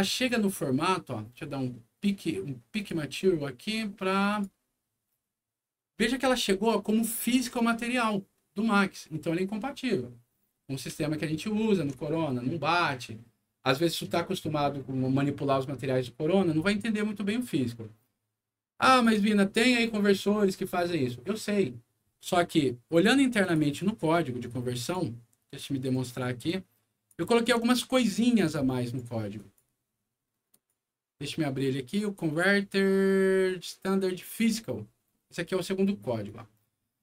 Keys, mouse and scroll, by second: 0.0 alt+click, 2.7 click, 4.2 click, 5.8-6.4 scroll up 2, 7.1 click, 10.2 scroll down 1, 10.5 scroll up 1, 10.9 alt+middle click, 18.8 click, 23.3 click, 24.8 click, 25.7 right click, 26.4 click, 28.8 right click, 29.3 click, 30.5 click, 34.1 click, 36.2 click.